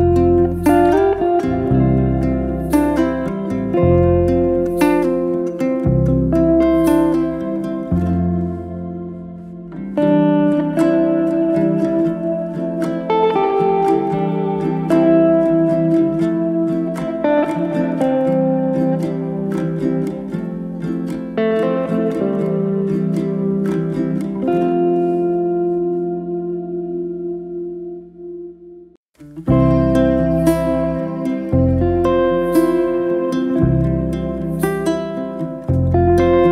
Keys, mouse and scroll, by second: 0.2 click, 0.6 drag, 1.1 click, 1.3 click, 2.1-3.1 scroll up 1, 3.1-4.5 middle drag, 4.5 KP_7, 5.5 shift+right click, 5.9 shift+a, 7.3 s, 9.1 Tab, 9.3 middle click, 10.0 f, 10.2-11.5 middle drag, 11.5 e, 18.5 middle drag, 18.8 scroll up 1, 19.2 shift+middle click, 19.8 Tab, 20.0-20.8 shift+middle drag, 20.8 KP_1, 21.5-24.1 middle drag, 24.1 g, 25.8 s, 26.5-27.5 middle drag, 27.5 g, 29.5 s, 30.6 middle click, 31.5 s, 32.2 middle click, 33.1 g, 35.3 middle click, 35.8 s.